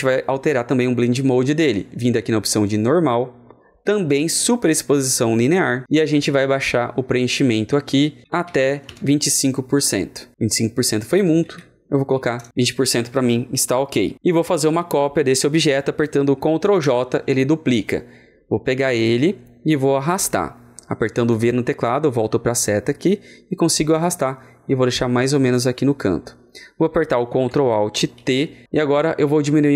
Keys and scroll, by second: 8.2 ctrl+a, 8.3 KP_2, 11.3 ctrl+a, 12.1 KP_2, 16.5 typing, 16.7 ctrl+j, 28.1 ctrl+alt+t.